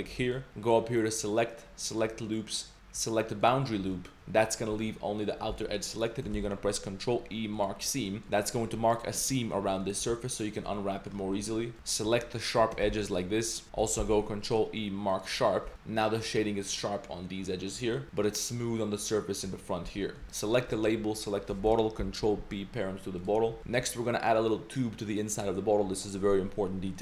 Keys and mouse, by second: 0.2 middle click, 1.1-3.8 drag, 4.0 middle drag, 5.6 middle drag, 6.0 right click, 7.6 ctrl+e, 8.1 drag, 8.6 2, 8.9 click, 9.2 3, 9.3 click, 9.5-9.9 middle drag, 10.5 ctrl+shift+drag, 10.7-11.1 middle drag, 11.3 middle click, 11.7 alt+2, 12.4 shift+click, 12.8 shift+g, 14.0 ctrl+e, 15.7 Tab, 15.8 a, 16.0 middle click, 17.7-18.0 middle drag, 18.2 click, 19.5 middle drag, 19.8 Tab, 20.0 middle click, 20.2 ctrl+s, 20.2 drag, 20.2 a, 20.2 z, 21.2 shift+click, 22.0 ctrl+p, 23.6 click, 23.6 z, 23.8 z, 23.9 click, 24.3 middle click, 26.7-27.0 middle drag.